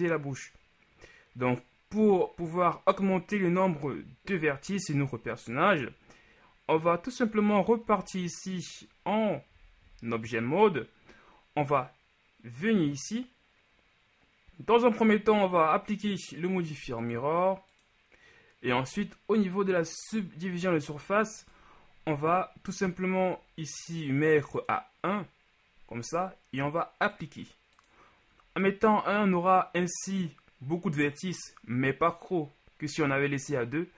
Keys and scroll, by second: 8.0 Tab.